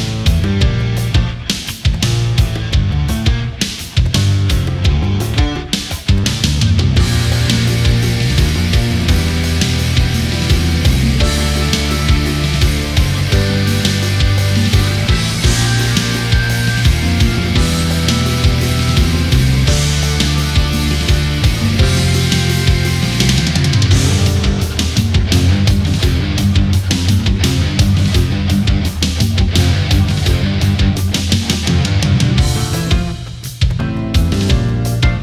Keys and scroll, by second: 3.2 ctrl+z, 13.8 space, 17.7 ctrl+z.